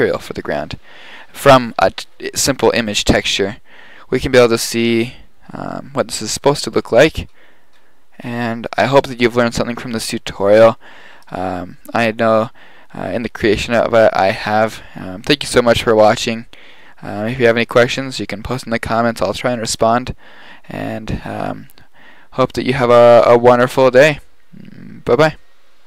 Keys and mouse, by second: 21.9 middle click.